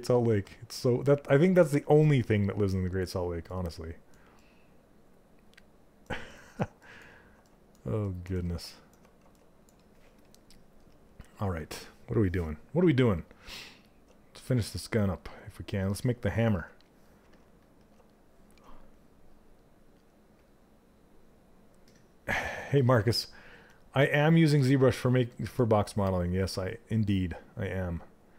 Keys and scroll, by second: 16.8 s.